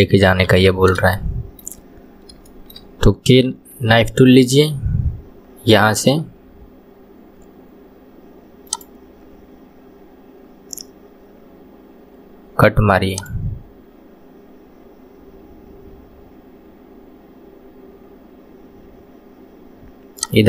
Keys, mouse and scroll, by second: 0.5 KP_3, 1.2 shift+middle click, 1.9 scroll up 2, 2.5-3.6 shift+middle drag, 3.6 k.